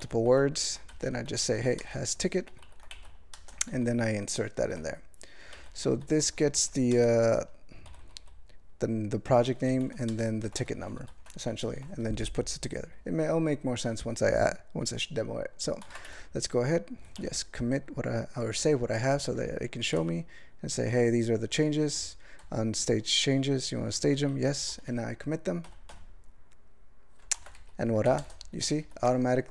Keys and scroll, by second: 0.0 ctrl+g, 0.3 ctrl+n, 0.9 alt+m, 1.3 alt+f, 1.4 alt+f, 1.6 alt+b, 1.8 ctrl+space, 1.9 ctrl+e, 2.5 ctrl+g, 2.7 ctrl+n, 2.9 alt+m, 3.3 ctrl+space, 3.7 ctrl+alt+f, 4.6 ctrl+g, 5.5 alt+m, 5.6 alt+f, 5.8 alt+f, 5.9 alt+f, 6.1 alt+f, 6.3 alt+b, 6.4 alt+b, 6.9 ctrl+space, 7.2 ctrl+alt+f, 7.9 ctrl+b, 8.0 ctrl+b, 8.2 ctrl+b, 9.6 ctrl+g, 9.8 ctrl+f, 10.1 ctrl+space, 10.6 alt+f, 11.0 ctrl+g, 11.6 ctrl+e, 28.0 alt+m, 28.2 ctrl+space, 28.2 ctrl+e, 28.8 ctrl+g.